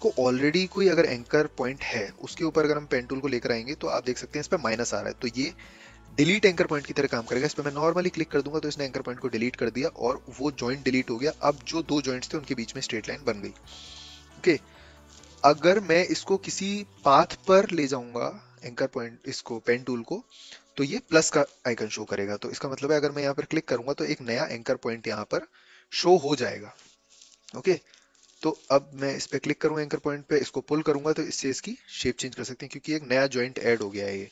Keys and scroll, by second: 28.0 a.